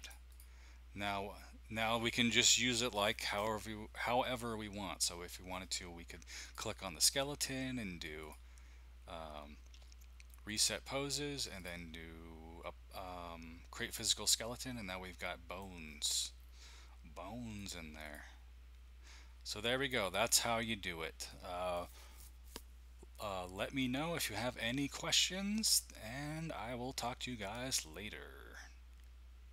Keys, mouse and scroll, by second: 0.0 click, 6.4-7.3 drag, 8.2 click, 10.4-12.4 drag, 13.8 click, 14.7-15.4 scroll up 1, 15.1 middle click, 15.8-16.4 scroll up 1, 16.4-17.5 scroll down 1, 17.5-21.3 drag, 21.3 middle click.